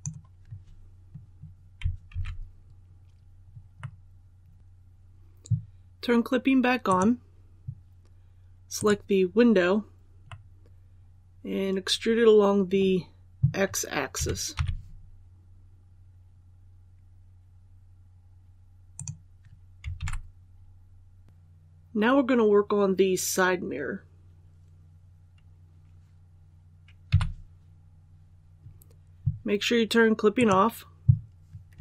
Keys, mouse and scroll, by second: 2.0 alt+a, 2.9 scroll down 1, 3.8 middle click, 6.8 click, 8.7 right click, 10.2-13.5 middle drag, 14.1-14.5 typing, 18.9 click, 19.9 alt+a, 21.2 click, 27.0 KP_1, 30.3 click.